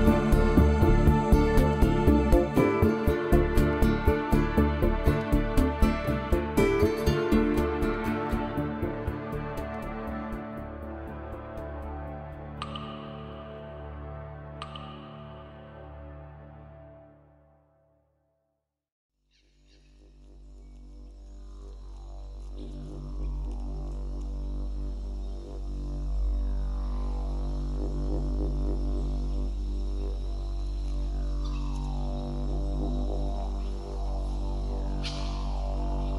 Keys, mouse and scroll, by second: 0.0 middle click, 1.6 KP_1, 2.3 a, 2.7 b, 3.5 right click, 3.5 Tab, 5.0 p, 8.1 Tab, 8.5 click, 9.0 click, 9.3 click, 9.6 click, 10.0 g, 10.8 right click, 11.0 middle click, 11.7 g, 12.6 right click, 12.9 middle click, 13.9 click, 14.3 middle click, 15.6 click, 16.0 middle click, 18.2 KP_0, 25.3 Escape, 26.3 KP_0, 26.7 middle click, 27.3 Tab, 27.6 middle click, 29.9 click, 32.7 middle click, 34.0 KP_7.